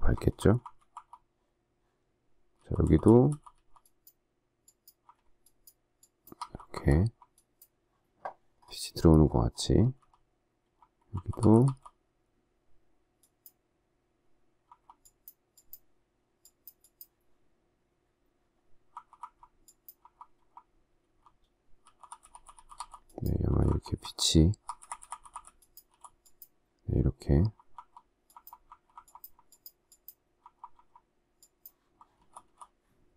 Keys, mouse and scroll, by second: 0.0-0.8 typing, 2.5-5.5 typing, 6.6-6.9 typing, 9.7-11.6 typing, 14.6 ], 18.8-25.8 typing, 27.0-29.2 typing, 30.3-30.7 typing, 32.1 typing.